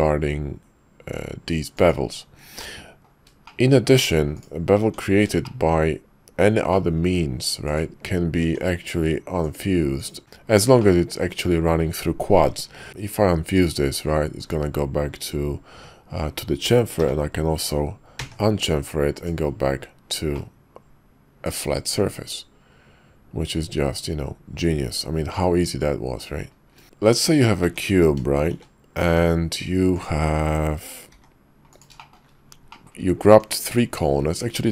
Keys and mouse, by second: 2.7 middle click, 3.9 Tab, 4.8 Tab, 5.4 shift+middle click, 6.7 click, 7.6 click, 8.4 Tab, 9.4 click, 9.9 click, 10.2-10.7 drag, 10.9 shift+click, 12.9 y, 17.0 y, 20.4-26.2 middle drag, 27.6 Tab, 28.5 shift+a, 31.1 g, 32.1 shift+middle click, 32.8 click, 33.2 Tab, 33.7 click.